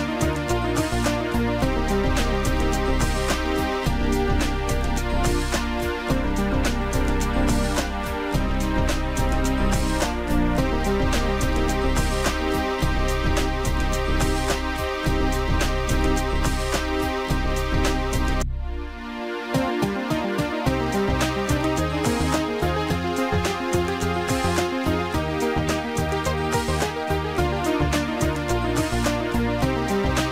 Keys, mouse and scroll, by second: 0.9 click, 3.0 click, 5.7 click, 12.7 click, 17.1 click, 20.1 ctrl+End, 22.7 ctrl+End, 22.7 click, 24.0 shift+click, 25.0 click, 28.1 click, 29.3 click.